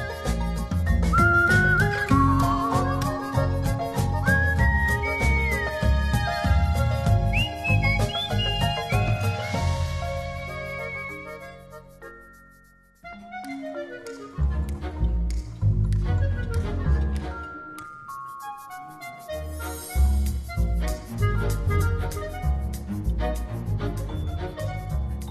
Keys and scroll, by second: 0.5 6, 5.5 super+z, 18.5 super+z.